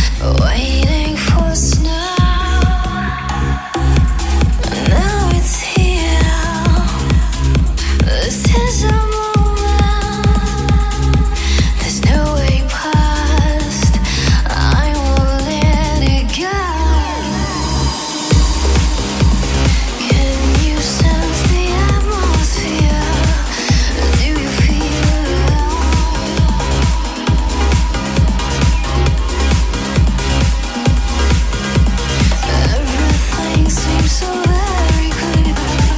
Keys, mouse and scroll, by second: 0.0-0.7 typing, 2.0-5.1 drag, 7.3 KP_3, 9.8-35.9 drag.